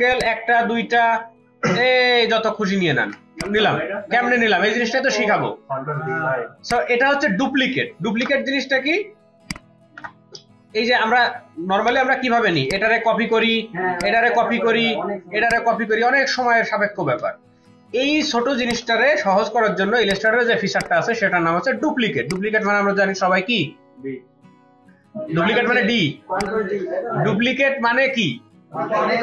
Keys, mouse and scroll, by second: 0.2 space, 1.7 ctrl+d, 8.2 BackSpace, 11.9 BackSpace, 14.8 alt+click, 15.5 alt+click, 16.3 alt+click, 17.1 ctrl+z, 17.6 ctrl+z, 18.0 ctrl+z, 22.1 space, 26.3 space.